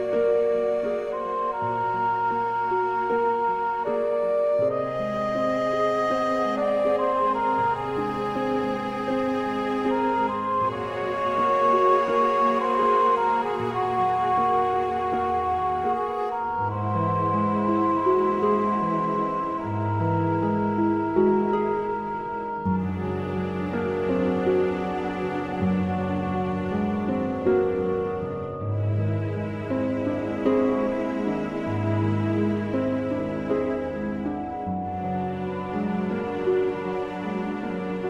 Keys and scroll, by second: 13.7 super+z, 22.2 super+a, 22.5 super+c, 23.5 super+v, 27.6 super+t, 33.7 Return.